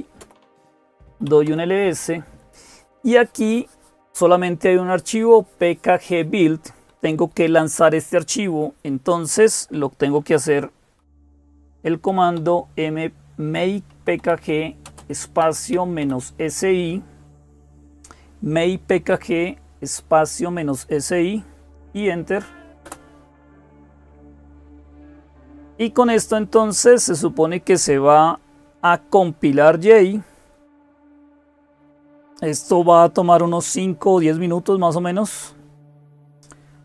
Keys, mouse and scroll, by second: 0.0-36.8 typing, 22.6 Return.